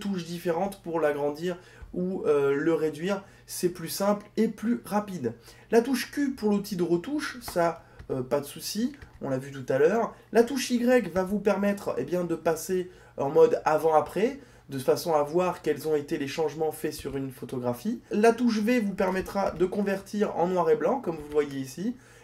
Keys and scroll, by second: 5.8 q, 11.3 y, 18.4 v.